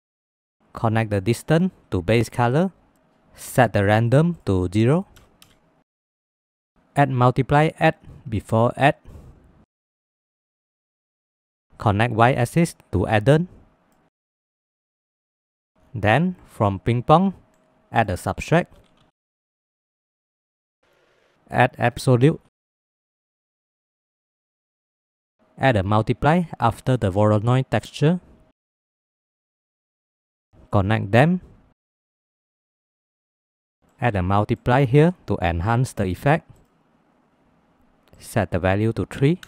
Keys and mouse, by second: 0.7-1.7 middle drag, 5.4 middle click, 6.4 middle click, 7.3 shift+d, 7.7 click, 8.1-10.0 drag, 11.1 middle click, 11.7-13.9 drag, 15.3 middle click, 16.2 middle click, 17.5-20.0 drag, 18.2 BackSpace, 20.9 middle click, 24.9 middle click, 25.4 middle click, 25.5 shift+a, 28.2 click, 29.0-30.4 drag, 30.9-32.1 drag, 33.9 middle drag, 34.1 click, 34.5 click, 34.7 shift+d, 38.1-39.4 drag.